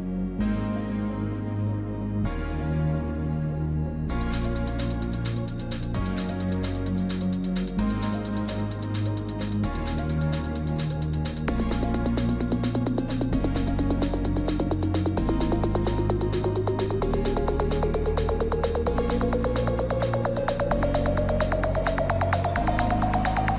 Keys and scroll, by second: 8.4 ctrl+l, 16.4 ctrl+t, 21.9 ctrl+j, 22.3 ctrl+t.